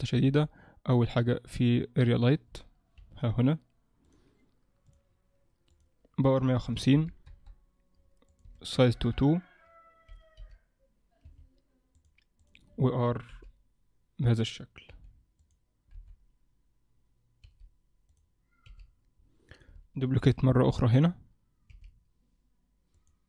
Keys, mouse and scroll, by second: 0.2 shift+a, 3.0 g, 4.8 click, 5.7 click, 10.4 r, 12.0 click, 13.3 r, 14.9 g, 16.0 KP_7, 17.4 g, 18.6 r, 20.2 shift+d, 21.7 r.